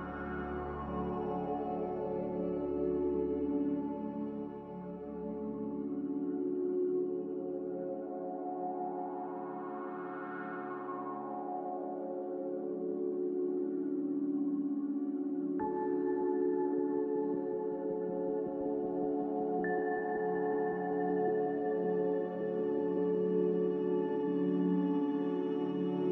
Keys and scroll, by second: 5.7 z, 7.7-8.5 typing, 11.6 BackSpace, 12.8-14.1 typing, 20.6 x, 21.9-23.3 typing.